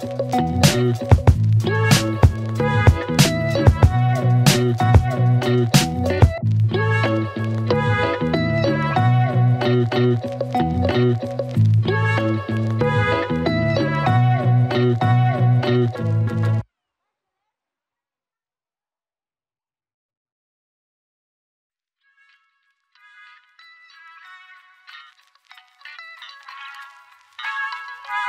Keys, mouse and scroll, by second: 1.1 click, 2.7 click, 5.2 click, 7.0-7.9 click, 10.6 click, 12.1 click, 17.9 click, 19.6 click, 24.5-26.0 click, 26.8 s, 28.0-28.2 click.